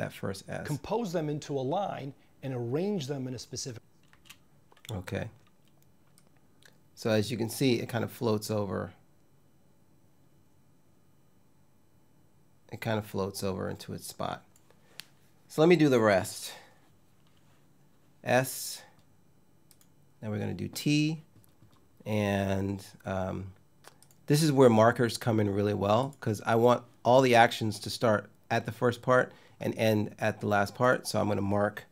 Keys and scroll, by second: 3.7 space, 31.7 m.